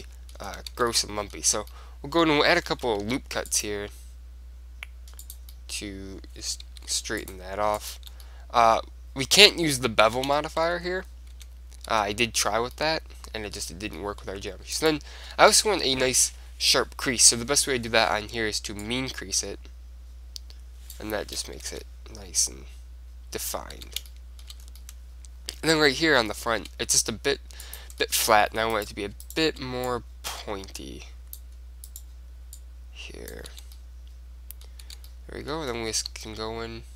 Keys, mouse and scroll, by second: 0.8 Tab, 3.1 ctrl+r, 5.7-7.4 middle drag, 6.8 ctrl+r, 8.0-9.9 drag, 8.1 Tab, 8.4-9.7 middle drag, 10.3 Tab, 10.5-14.9 middle drag, 11.5 Tab, 12.2 Tab, 14.9 click, 14.9-16.6 right drag, 19.0-20.7 drag, 21.8 Tab, 22.0-23.7 middle drag, 24.0 Tab, 24.2-27.8 middle drag, 27.8-29.4 drag, 28.9-30.0 right drag, 30.0 middle click, 30.9 click, 32.1-33.7 right drag, 32.7-34.7 drag, 33.7 Tab, 34.7 middle click, 35.0 Tab, 35.2 middle click, 36.0 z.